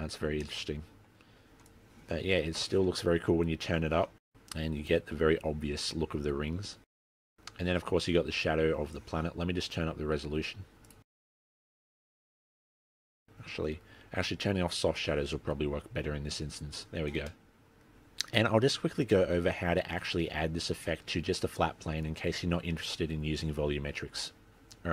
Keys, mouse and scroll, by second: 0.7 middle click, 1.2-1.7 scroll up 2, 1.9 click, 8.5-9.2 scroll down 8, 9.2 click, 9.2-9.7 scroll down 4, 11.2 click, 12.7 click, 17.2 scroll down 2, 17.5 middle click, 19.1 scroll up 2, 24.3 z.